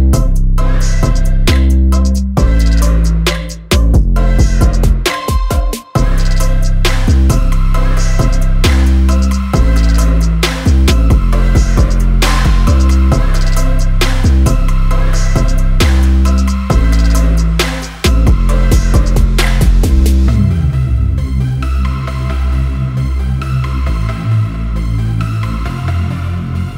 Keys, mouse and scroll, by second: 0.0 scroll up 1, 0.1 click, 0.1 middle drag, 0.4 g, 1.2 click, 1.2 shift+middle click, 1.4 g, 1.7 middle click, 2.3 scroll up 1, 2.4 click, 2.5 middle click, 2.6 g, 3.0 middle click, 3.3 click, 3.4 middle click, 3.4 g, 3.9 middle click, 4.6 Tab, 4.7 middle click, 4.7 scroll up 1, 4.9 click, 5.1 shift+click, 5.1 middle click, 5.3 shift+click, 5.5 middle click, 5.8 g, 6.4 shift+middle click, 6.7 click, 7.6 g, 8.1 g, 8.4 middle click, 8.5 scroll down 2, 8.6 middle click, 8.8 Tab, 9.4 click, 9.9 g, 10.1 click, 10.3 g, 10.9 shift+middle click, 11.3 click, 11.4 shift+middle click, 11.6 g, 11.9 middle click, 12.1 click, 12.2 g, 12.9-13.6 middle drag, 13.6-13.9 scroll up 1, 13.9 shift+click, 14.0 middle click, 14.1 g, 15.0 g, 15.3 click, 15.4 g, 16.0-16.4 middle drag, 16.4 scroll up 1, 16.9-21.5 typing, 17.0 scroll down 2, 17.1 scroll up 1, 17.2 shift+middle click, 17.2 Tab, 17.4 click, 17.5 middle drag, 18.4 middle click, 19.0 middle click, 19.2 click, 19.3 middle click, 19.9 middle click, 20.4 click, 21.0 alt+click, 21.4 click, 21.8 middle click, 22.0 Tab, 22.1 middle click, 22.4 Tab, 22.9-24.0 shift+middle drag, 24.0 scroll up 2, 24.0-24.4 middle drag, 24.4 a, 24.5-24.9 middle drag, 24.9 Tab, 25.0-25.8 middle drag, 25.8 KP_Decimal, 25.8 KP_1, 26.0 scroll up 3, 26.0 a, 26.2 click, 26.2 shift+middle click.